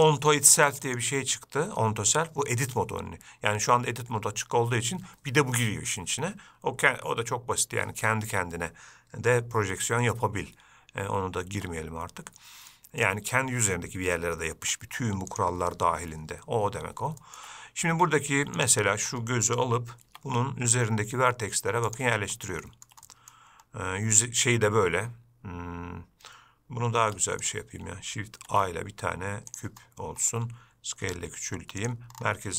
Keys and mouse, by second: 0.3-11.3 drag, 11.7 Tab, 13.0 middle click, 15.6-16.3 drag, 17.5 shift+middle click, 20.3 g, 22.9 shift+middle drag, 23.3 middle click, 27.3 x, 28.7 shift+a, 31.3 s.